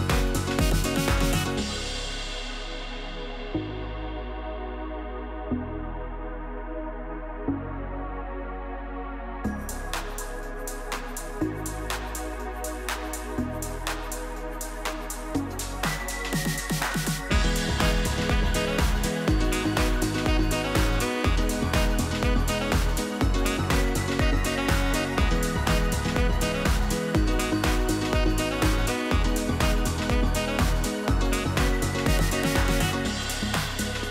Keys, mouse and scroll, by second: 1.5 click, 2.4 click, 3.5 s, 5.0 click, 5.4 s, 8.2 click, 9.0 g, 10.8-11.1 scroll up 1, 11.1-12.7 middle drag, 12.8-13.1 middle drag, 13.1-13.6 scroll up 1, 13.6 a, 14.2 e, 16.1 KP_3, 17.1 scroll up 1, 17.2 middle click, 17.9 ctrl+r, 18.9 Escape, 19.3 click, 20.0 click, 20.6 middle click, 21.3 click, 21.8 shift+middle click, 22.3 shift+click, 22.8 shift+click, 23.5 middle click, 24.1 shift+click, 25.0 s, 27.4 click, 27.8 middle click, 28.6 click, 29.3 click, 29.5-31.0 middle drag, 32.0 click, 32.4-33.9 middle drag, 33.9 drag.